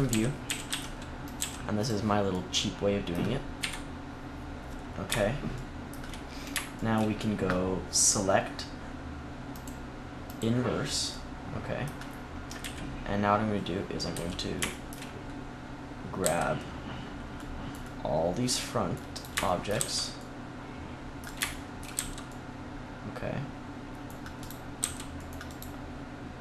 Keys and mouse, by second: 0.0 a, 0.4 a, 0.6 s, 1.3 g, 1.8-3.5 drag, 3.5 KP_1, 12.5 KP_3, 14.0 z, 16.1 c, 19.1 click, 19.5-21.4 middle drag, 21.4 middle click, 21.8 c, 24.7 c, 25.9-26.4 middle drag.